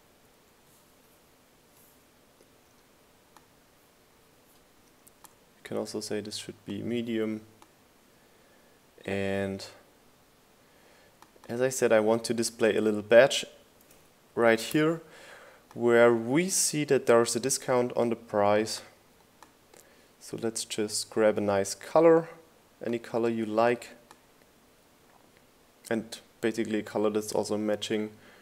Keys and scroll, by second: 0.0-0.6 typing, 2.4 0, 17.0 r.